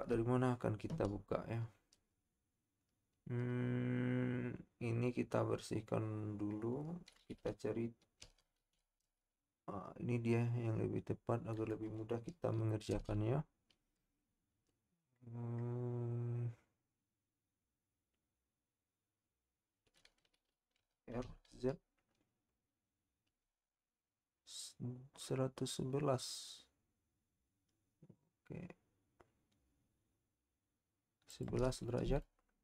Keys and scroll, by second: 8.2 r, 8.7 z, 21.2 z.